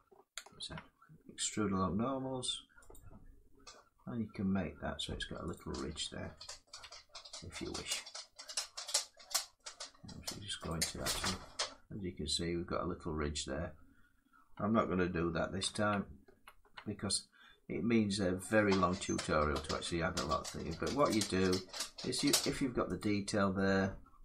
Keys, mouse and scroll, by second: 0.2 ctrl+z, 1.2 right click, 2.6 click, 5.1 click, 5.2 click, 6.5 Tab, 6.9 scroll down 1, 7.3 click, 8.7 middle click, 10.3 Tab, 10.4 click, 11.3 middle click, 11.6 middle click, 15.3 ctrl+z, 16.0 ctrl+z, 17.0 middle click, 18.6-19.7 scroll up 2, 20.8 click, 22.3 middle click, 22.7 click.